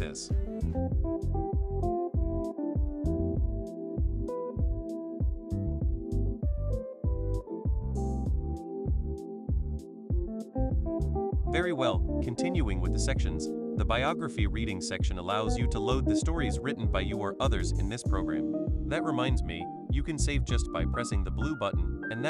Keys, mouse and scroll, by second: 0.9 click, 4.3 click, 5.7-7.2 drag, 8.1 click, 8.9 click, 17.4 click, 21.6 click.